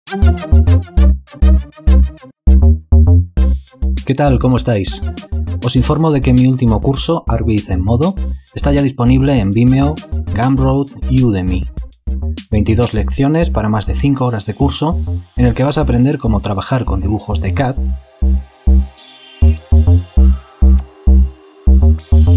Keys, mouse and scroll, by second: 0.1 click, 1.4 click, 2.0 click, 2.3-4.1 typing, 2.5 click, 3.2 click, 3.9 alt+shift+click, 4.0 alt+double click, 4.3 click, 4.9 alt+click, 5.5 click, 5.9 alt+shift+click, 6.1 click, 6.2 double click, 6.3 alt+space, 6.3 click, 6.4 alt+click, 7.1 alt+click, 7.3 ctrl+alt+click, 7.5 alt+shift+click, 8.7 click, 9.0 click, 9.8 click, 10.6 space, 10.8 click, 10.8 scroll down 3, 11.3 b, 11.4 click, 11.7 click, 12.5 alt+space, 12.6 alt+click, 12.9 alt+click, 13.2 alt+shift+click, 13.4 click, 13.5 alt+shift+click, 14.2 click, 14.6 click, 15.0 space, 15.2 click, 15.3 ctrl+alt+click, 15.4 alt+click, 15.6 alt+shift+click, 16.0 b, 16.4 click, 16.7 click, 16.7 space, 16.9 ctrl+alt+click, 17.1 alt+click, 17.2 alt+double click, 17.3 alt+click, 17.5 alt+shift+click.